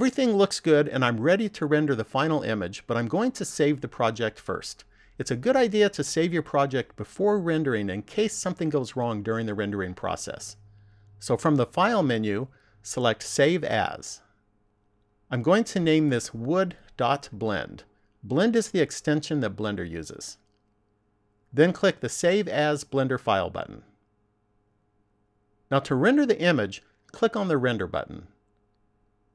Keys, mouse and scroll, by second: 12.2 click, 22.2 click, 29.0 click.